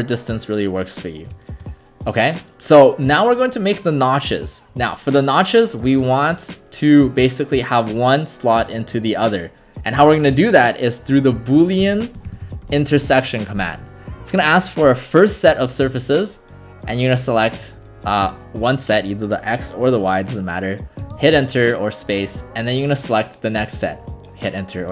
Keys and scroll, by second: 11.6-13.2 typing, 21.0 space.